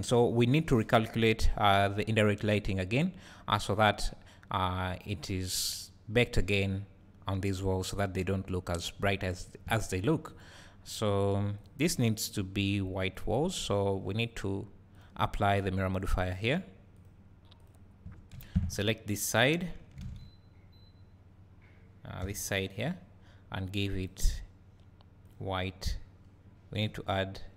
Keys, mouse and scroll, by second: 10.4 click, 17.6 click, 18.3 Tab, 20.0 alt+a, 22.8 b.